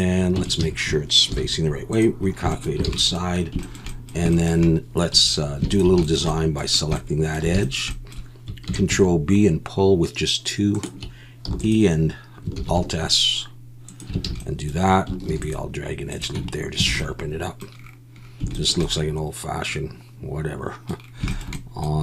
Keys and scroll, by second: 0.4 Tab, 0.6 a, 1.3 alt+n, 2.9 alt+a, 5.1 2, 8.7 ctrl+b, 11.5 e, 12.6 alt+s, 14.3 alt+a, 15.3 ctrl+r, 16.4 Tab, 16.9 alt+a.